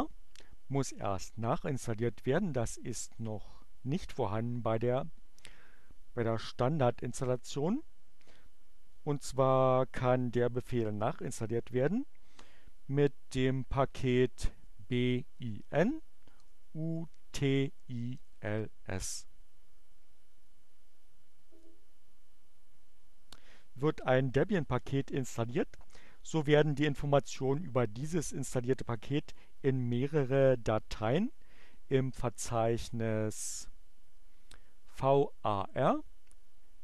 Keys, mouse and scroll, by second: 12.4-13.3 typing, 14.9-15.8 typing, 16.9-18.4 typing, 20.3 BackSpace, 33.4 click.